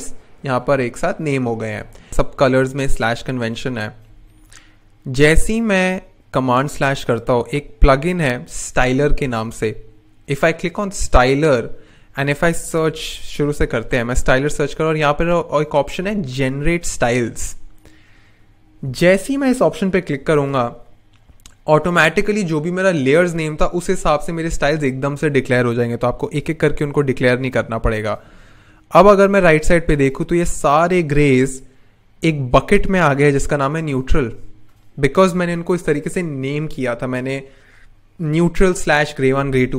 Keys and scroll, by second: 6.7 super+/, 12.4-13.9 typing.